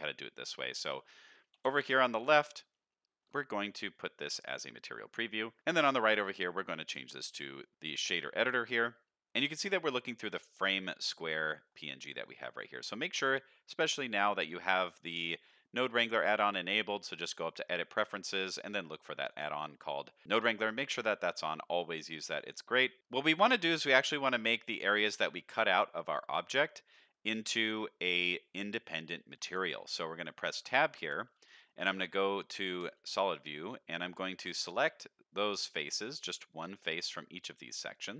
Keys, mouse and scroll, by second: 0.3-0.9 shift+middle drag, 1.5 t, 2.0 shift+middle drag, 2.3-2.7 scroll up 2, 2.7-3.2 shift+middle drag, 3.4 middle drag, 3.7 z, 5.6 shift+middle click, 6.3 click, 8.2 shift+click, 8.2 shift+middle click, 8.5-9.2 scroll down 2, 9.2 click, 9.2 middle click, 9.2 scroll up 3, 10.1 click, 11.5 middle click, 12.2 click, 13.7 middle click, 15.5 middle click, 18.6 click, 19.1 click, 19.5 middle click, 19.9 middle click, 20.2 click, 20.8 middle click, 21.2 middle click, 21.8 click, 22.3 click, 23.0 middle click, 23.8-24.2 middle drag, 24.7 middle drag, 25.5-26.9 middle drag, 27.1-28.5 middle drag, 28.7-29.4 middle drag, 29.6 Tab, 30.0 middle click, 31.0 3, 31.3 middle click, 31.8 click, 32.1 middle click, 32.4 z, 33.1-33.4 scroll up 1, 33.4 middle click, 34.3 shift+click, 34.6 middle click, 35.3 shift+click, 35.6 middle click, 36.5 shift+click, 36.8 middle click, 37.9 shift+click.